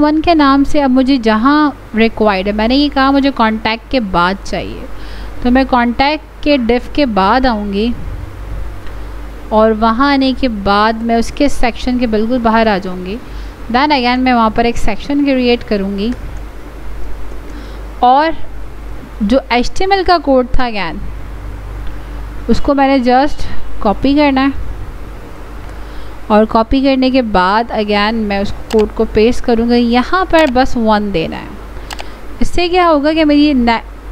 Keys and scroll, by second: 25.2 ctrl+c, 28.8 ctrl+v.